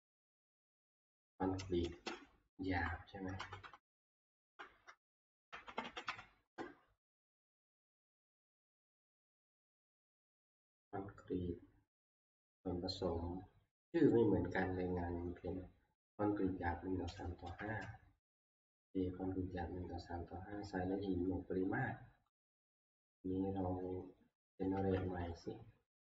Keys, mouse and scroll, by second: 0.0 Left, 0.0 Right, 0.4 ctrl+v, 2.1-2.8 Left, 3.4 Left, 3.6 Left, 3.8 Left, 4.0 Left, 4.2 Left, 4.4 Tab, 4.4 Left, 5.3-6.5 typing, 8.9 alt+Tab, 14.2 click, 14.5-22.0 drag, 17.6 alt+Tab, 22.9 click, 24.7 middle click, 25.0 ctrl+q.